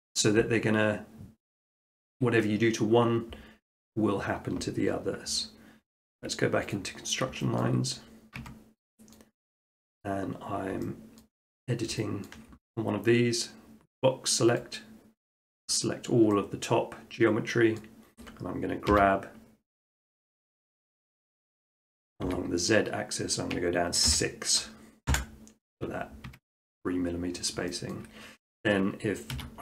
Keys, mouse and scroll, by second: 0.1 middle click, 1.6 middle click, 2.1 shift+middle click, 6.7 click, 7.6 shift+middle click, 8.0 middle click, 8.2 middle click, 8.4 shift+middle click, 8.4 Tab, 9.2 middle click, 10.0 middle click, 10.6 middle click, 11.2 shift+middle click, 11.6 middle click, 11.8 middle click, 12.0 shift+middle click, 12.3 scroll, 15.7 click, 17.8-18.9 middle drag, 19.0 g, 21.6-22.7 drag, 22.3 z, 24.1 6, 25.1 Return, 26.3 Tab, 27.1 middle click, 27.3 middle click, 28.0 shift+middle click, 28.1 shift+middle click, 29.3 s.